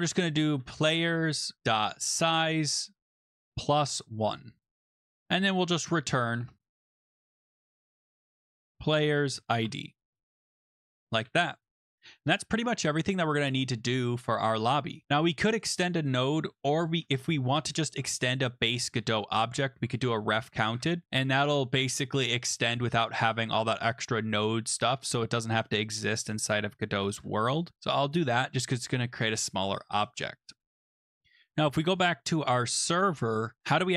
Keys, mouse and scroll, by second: 0.0-11.6 typing, 1.6 Tab, 5.0 Down, 5.1 Tab, 5.1 Return, 11.1 click, 12.9-13.6 typing, 13.1 click, 15.6 click, 15.7 click, 19.4-21.0 typing, 23.3 click, 24.5 c, 26.2 click, 27.1 ctrl+s, 31.4 click, 32.6 click.